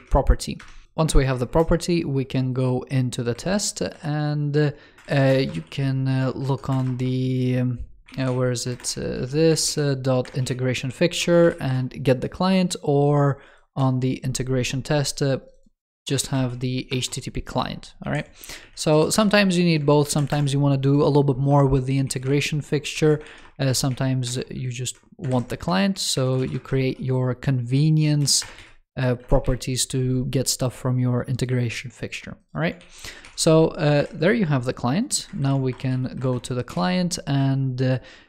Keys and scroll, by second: 1.4 shift+super+], 4.9 shift+super+Left, 17.4 super+z, 17.9 super+d, 18.5 super+z, 19.2 super+d, 20.2 alt+BackSpace, 23.1 ctrl+s, 25.2 shift+super+Right, 32.7 super+s, 33.1 super+w, 33.9 shift+super+], 35.3 shift+super+Left.